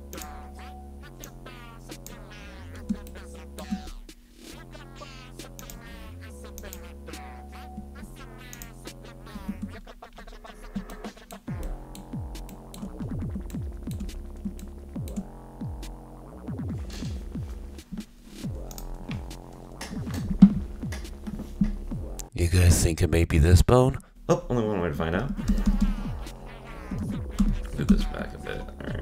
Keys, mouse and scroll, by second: 0.1-1.3 drag, 3.1 shift+middle click, 3.8-5.6 scroll down 3, 5.6 click, 6.6 click, 8.5 click, 9.5 ctrl+Tab, 10.1-10.6 scroll up 9, 10.9-13.0 shift+middle drag, 13.0-13.5 scroll up 2, 13.5-14.2 shift+middle drag, 14.2-14.6 scroll up 1, 14.6-17.7 shift+middle drag, 18.7 click, 24.1-25.1 scroll down 7, 25.4 z, 25.5 z, 25.7 z, 25.9 z, 25.9-26.9 scroll down 14, 27.0 z, 27.4 z, 28.6-29.0 scroll up 11.